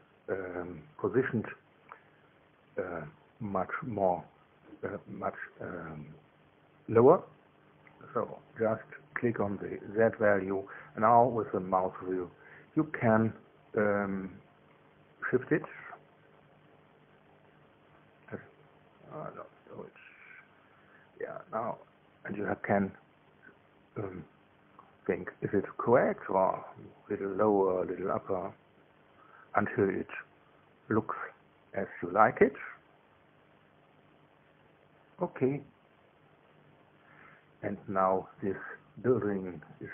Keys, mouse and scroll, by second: 1.6 click, 10.4 click, 11.3 KP_Subtract, 11.8 KP_4, 12.0 KP_8, 13.2 KP_Enter, 23.0-23.5 scroll up 1, 23.5-23.9 scroll down 1, 24.0 middle click, 24.6 middle click, 29.9 middle click, 31.9 middle click.